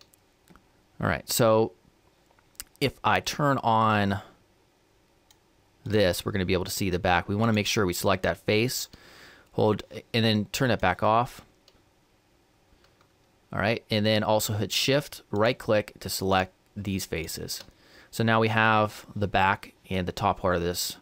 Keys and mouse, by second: 3.9-7.7 drag, 7.5-9.3 right drag, 10.7-12.6 drag, 15.4-19.1 right drag.